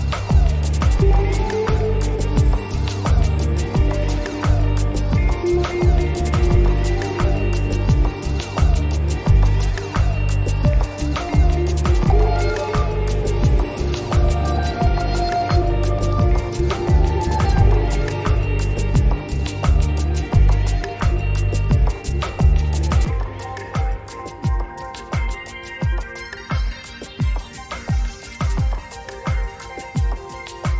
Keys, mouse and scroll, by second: 5.5 click, 8.3 click, 18.5 click, 20.9 click, 25.1-27.2 ctrl+drag, 29.8 click.